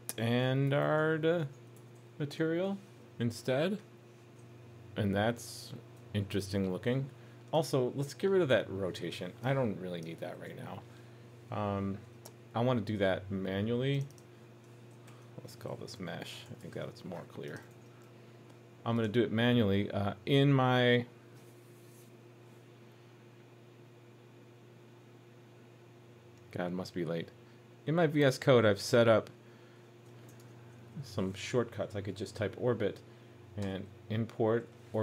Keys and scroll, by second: 2.6 super+s, 15.1 super+d, 17.7 super+s.